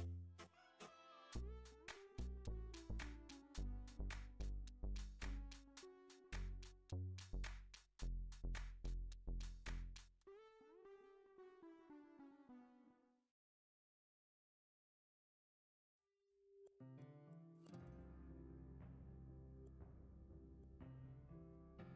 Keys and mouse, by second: 1.1-2.8 drag, 3.9 click, 6.1-9.1 drag, 12.4 KP_1, 13.3 x, 14.4 shift+a, 16.0 g, 18.7 F6, 18.7 s, 20.1 g, 21.6 s.